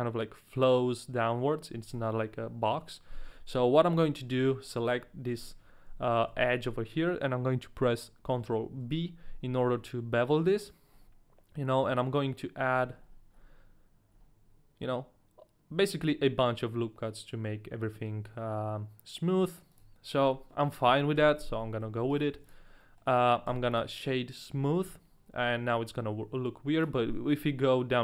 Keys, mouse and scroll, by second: 4.0 middle click, 4.3 a, 4.6 right click, 6.2 KP_1, 8.2 KP_1, 8.8 ctrl+b, 8.8 KP_1, 10.9-11.6 scroll up 1, 11.6 scroll up 2, 12.5-14.1 scroll up 7, 14.1-17.1 scroll up 1, 19.7 click, 21.2 Tab, 21.6 middle click, 22.0 a, 22.1 right click, 22.4 Tab, 22.4 middle click, 22.4 right click, 22.4 a, 22.8 middle click, 23.5 w, 25.4 middle click, 26.8 click.